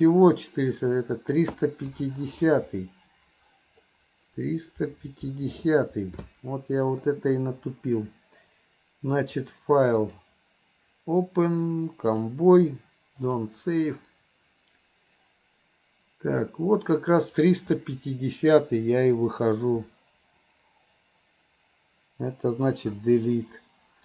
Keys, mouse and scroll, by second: 1.2 click, 9.4 click, 12.2-14.4 drag, 16.4-17.4 drag, 23.0 Delete.